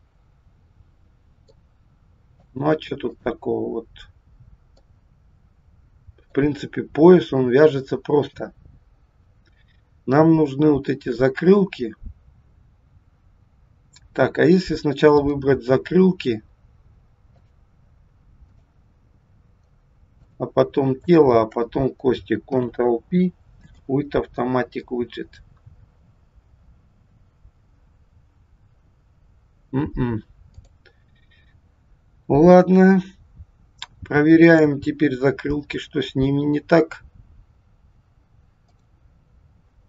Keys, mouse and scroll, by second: 1.5 middle click, 3.0 click, 4.8 middle click, 15.1 click, 17.4 shift+click, 18.5 shift+click, 20.1 shift+click, 21.0 shift+click, 22.4 ctrl+p, 30.5 click, 34.4 click, 38.7 click.